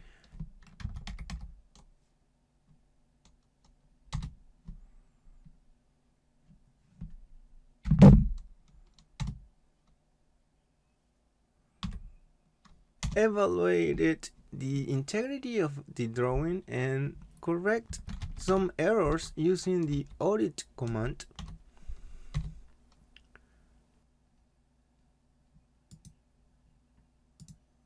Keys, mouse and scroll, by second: 0.6-1.8 typing, 4.2 Return, 9.7 Return, 11.9 typing, 13.0 Return, 17.6-19.1 typing, 19.9 Return, 26.1 click.